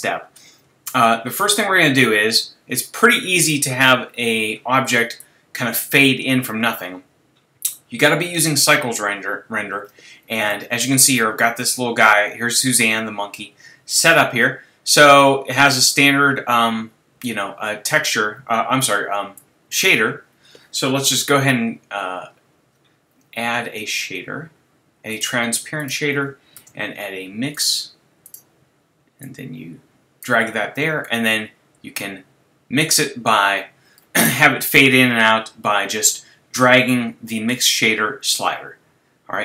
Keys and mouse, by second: 1.5-6.4 drag, 19.4-21.1 drag, 21.1 shift+a, 26.6 shift+a, 30.0 shift+a.